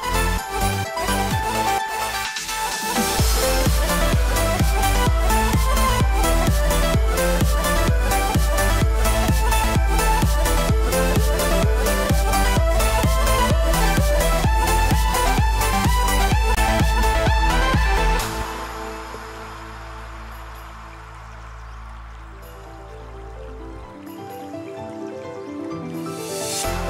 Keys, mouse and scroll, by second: 1.5 alt+shift+click, 3.6 shift+middle click, 4.9 alt+shift+click, 7.1 scroll down 2, 7.3 shift+middle click, 7.6 scroll up 1, 8.2 scroll up 1, 9.0 alt+shift+click, 12.5 alt+shift+click, 21.7 middle click, 23.3 c, 25.7-26.5 scroll down 3, 25.9 middle click, 26.5 scroll down 2, 26.7 shift+middle click.